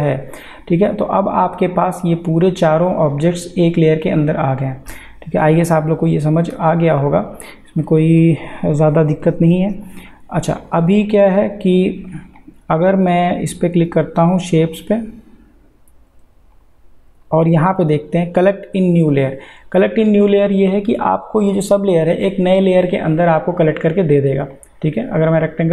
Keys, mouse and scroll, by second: 0.5-4.6 drag, 5.2 click, 5.5 ctrl+z, 7.2 click, 10.6 click, 22.9 click.